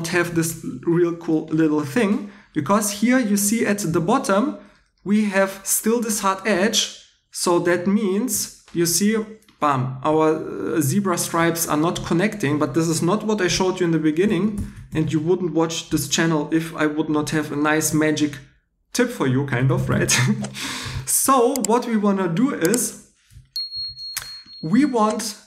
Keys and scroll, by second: 6.5 2, 19.6 super+z, 19.9 super+z, 20.8 shift+e.